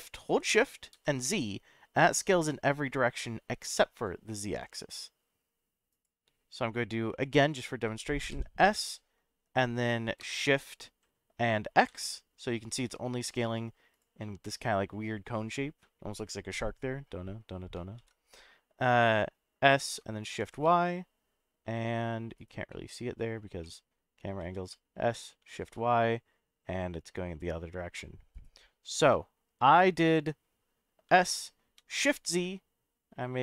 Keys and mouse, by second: 0.9 shift+z, 5.9 drag, 8.3 s, 11.8 shift+x, 13.9 click, 14.2-17.1 middle drag, 18.0 ctrl+z, 19.6 s, 20.4 shift+y, 22.4 right click, 22.7-23.3 middle drag, 23.6-23.9 middle drag, 24.4 s, 25.3 shift+y, 28.3 right click, 29.2-30.3 middle drag, 31.1 s, 32.2 shift+z.